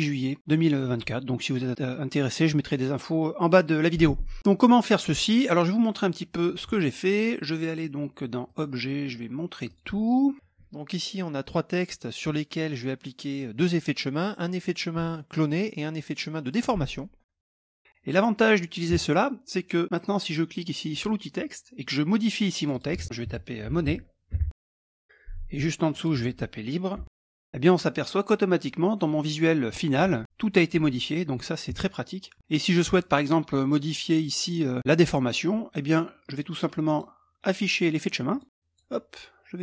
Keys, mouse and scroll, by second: 0.4-1.2 scroll up 2, 5.8 middle click, 5.9-6.7 scroll, 8.5 click, 9.7 click, 10.4 ctrl+scroll down 1, 10.6 ctrl+middle click, 11.1 click, 20.9 click, 22.6 click, 23.3 Caps_Lock, 23.4-25.4 typing, 25.9 click, 26.8-27.6 typing, 36.9 click, 38.3 click, 39.1 click.